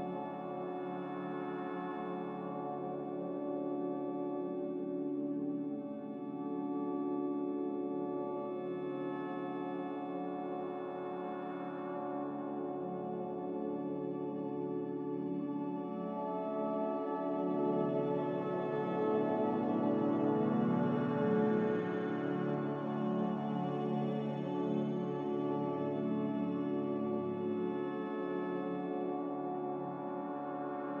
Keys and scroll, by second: 4.2-6.0 typing, 7.1-8.0 typing, 10.8-11.5 typing, 25.0-26.0 typing, 26.1 Delete.